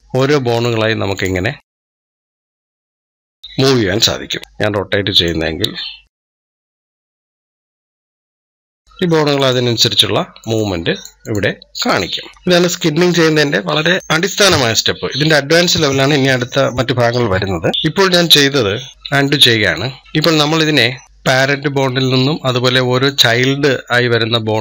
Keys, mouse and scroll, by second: 0.4-0.9 drag, 1.0-2.8 drag, 3.3 scroll up 1, 4.3 click, 5.1-6.1 drag, 7.0-11.7 drag, 12.3-15.8 middle drag, 17.7 middle click, 18.2 scroll up 1, 18.3 scroll down 1, 18.9 ctrl+z, 19.0 ctrl+z, 19.4 ctrl+z, 19.6-20.0 ctrl+z, 20.2 ctrl+z, 20.4 ctrl+z, 21.0 scroll down 1, 21.1 click, 22.9 click, 24.5 click.